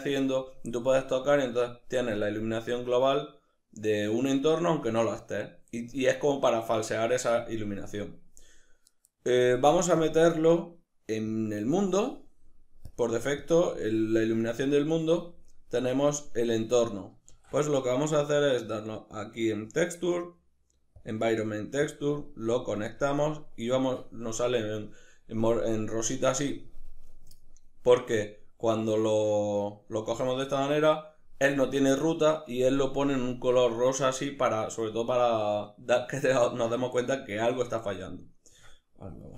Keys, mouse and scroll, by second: 10.0-12.4 drag, 12.4 middle click, 12.9 click, 13.4 click, 16.4-22.0 middle drag, 17.3 shift+a, 22.0 click, 22.5 click, 38.6 z.